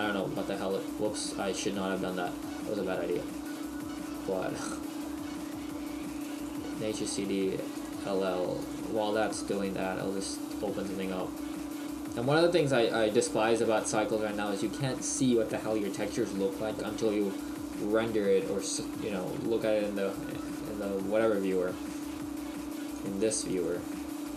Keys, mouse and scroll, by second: 22.9 click.